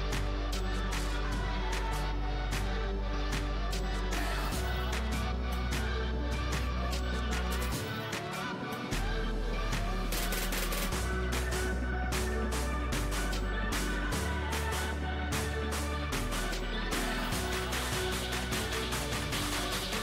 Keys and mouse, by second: 0.0 Tab, 1.2 z, 2.0 z, 4.7 z, 5.8 x, 7.7 z, 8.2 a, 9.1 click, 9.3 z, 11.0 click, 12.3 z, 13.4 Tab, 15.0 KP_1, 18.4 click, 18.5-20.0 right drag.